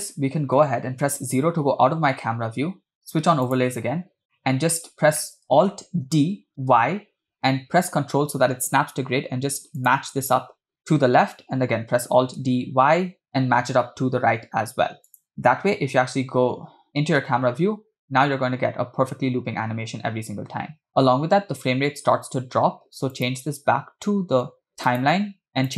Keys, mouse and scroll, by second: 1.4 KP_0, 3.6 click, 4.4-4.8 middle drag, 4.9 scroll down 2, 5.2 middle drag, 7.0 alt+d, 13.3 ctrl+alt+d, 15.8 KP_0, 17.4 space, 21.1 space, 23.2-25.0 drag.